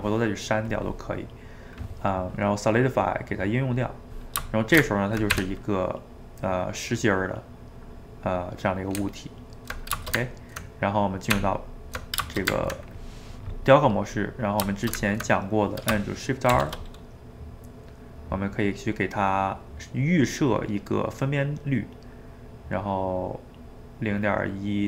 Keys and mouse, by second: 0.8 click, 3.0-4.6 drag, 4.6 shift+right click, 4.9 ctrl+middle click, 5.4 Tab, 5.9-9.0 middle drag, 9.0 Tab, 10.1-11.3 ctrl+shift+middle drag, 11.3 Tab, 12.3-16.5 ctrl+shift+middle drag, 16.5 shift+r.